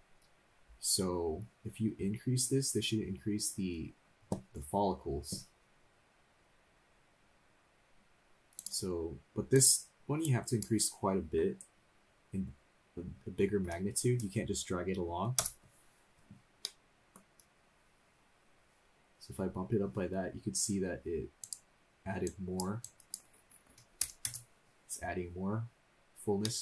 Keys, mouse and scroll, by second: 8.5-15.4 drag, 16.6 middle click, 21.4-24.3 drag, 25.3-25.6 scroll down 1, 25.7 scroll up 1, 26.4 middle click.